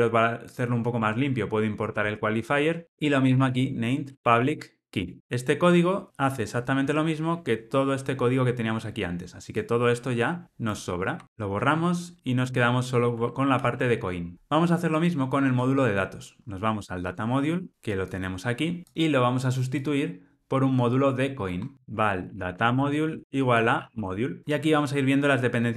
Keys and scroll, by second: 0.9 alt+Return, 4.1 Return, 5.2 ctrl+alt+o, 13.0 ctrl+alt+o, 13.5 alt+super+l.